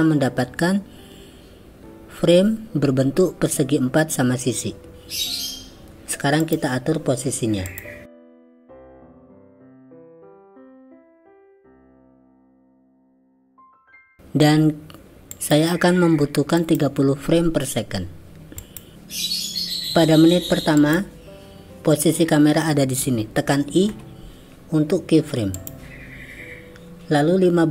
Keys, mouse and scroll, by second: 7.8 click, 8.3 click, 8.9 click, 10.1 click, 10.3 click, 10.9 click, 11.2 click, 12.0 click, 14.0 click, 15.3 click, 16.7-18.8 drag, 20.8 click.